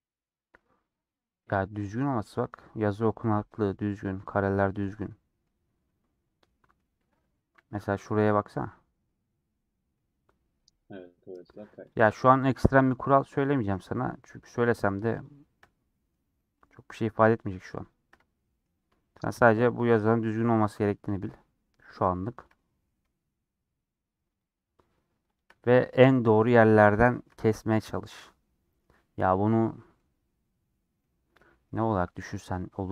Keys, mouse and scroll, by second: 0.0-1.3 scroll up 1, 1.3-7.6 middle drag, 7.6 a, 7.9-11.9 middle drag, 11.9 click, 12.3 middle click, 12.8 2, 14.6 shift+click, 15.6-17.4 middle drag, 17.4 shift+click, 18.1-19.5 middle drag, 19.5-19.8 scroll up 2, 19.8-21.1 middle drag, 21.1 shift+click, 21.9 shift+click, 22.1-24.4 shift+middle drag, 24.4 shift+click, 25.3 shift+click, 25.9 middle click, 26.1 scroll down 1, 26.2 shift+middle click, 26.7-27.0 scroll up 1, 27.0 shift+middle click, 27.4-28.0 scroll up 2, 28.0-29.2 middle drag, 29.2-30.0 scroll down 1, 30.0-31.0 middle drag, 31.0 scroll down 2, 31.3 middle click, 31.8 scroll down 2, 32.1 middle click.